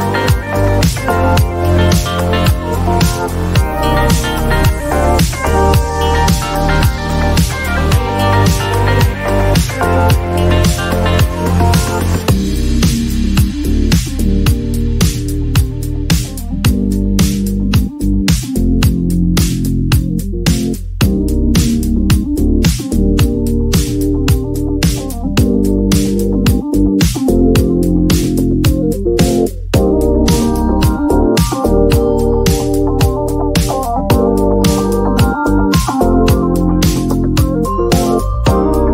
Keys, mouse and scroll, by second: 1.2 click, 1.9-2.9 typing, 4.6 click, 4.9-5.6 typing, 7.0 click, 9.7 click, 9.8 click, 10.2 click, 11.4 click, 12.4 click, 12.9 click, 13.6-15.0 typing, 16.6 click, 16.7 click, 19.1 click, 20.7 click, 22.7 click, 23.1-23.9 typing, 24.7 click, 26.5 click, 26.8-28.7 typing, 27.1 click, 27.6-29.0 drag, 29.2-31.8 drag, 33.6 click, 33.9-35.2 typing, 37.8-38.9 drag.